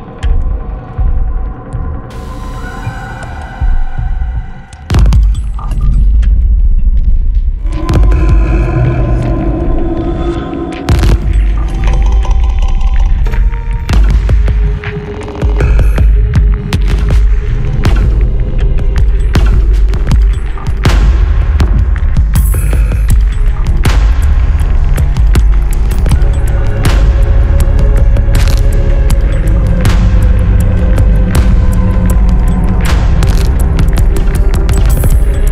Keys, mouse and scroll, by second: 1.4 m, 2.4 m, 3.4 m, 4.5 m, 5.0 m, 6.4 Escape, 8.5 scroll up 2, 9.1 Escape, 9.5 click, 12.8 click, 15.4 click, 17.2 click, 18.2 Escape, 20.6 click, 21.5 click, 22.9-23.3 scroll up 2, 24.6 click, 26.5 click, 28.5 click, 29.6 click, 33.7 click, 34.8 click.